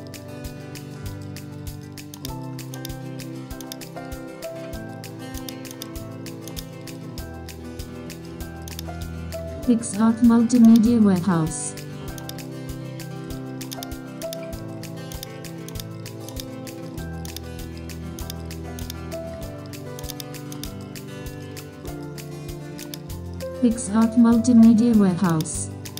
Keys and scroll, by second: 9.7 super+0, 11.5 super+t, 14.0 super+space, 15.4 super+space, 16.7 super+t, 24.6 super+t.